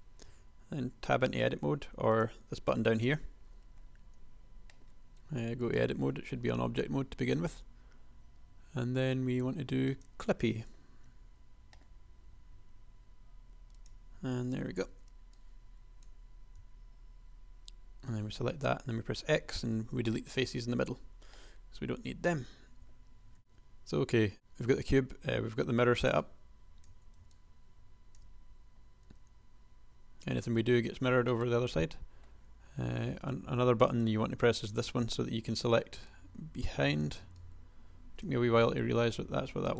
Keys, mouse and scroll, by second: 0.3 a, 0.7 a, 3.4 a, 4.3 g, 11.6 g, 14.6 a, 15.0 b, 16.7 x, 20.9 shift+click, 23.4 a, 29.1 g, 31.5-32.7 drag, 35.3 a, 38.7 g.